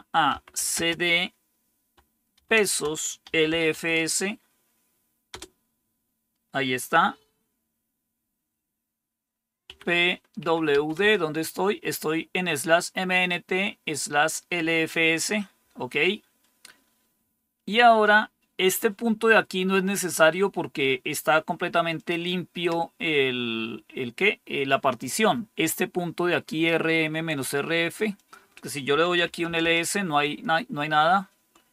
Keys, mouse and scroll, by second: 0.0-0.7 typing, 2.3-4.2 typing, 5.2 typing, 9.6-10.6 typing, 10.9 Return, 21.9 click, 28.1-29.1 drag, 29.0-29.9 typing.